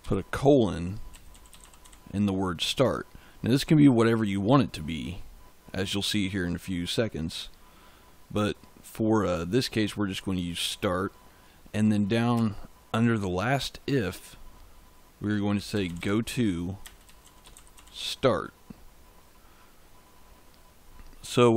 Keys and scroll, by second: 0.0-2.2 typing, 12.2 Return, 15.2-18.1 typing.